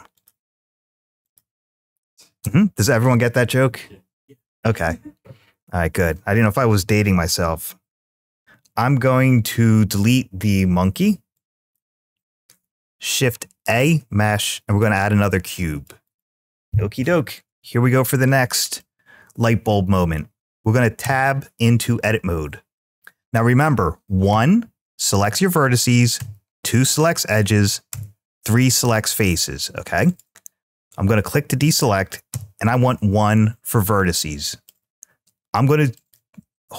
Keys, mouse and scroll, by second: 1.0 click, 2.2 Tab, 9.6 x, 13.1 shift+a, 18.6-20.0 middle drag, 20.8 Tab, 22.9 middle click, 24.1 1, 26.0 2, 27.7 3, 29.9 click, 32.1 1, 33.8 middle click, 35.7 click.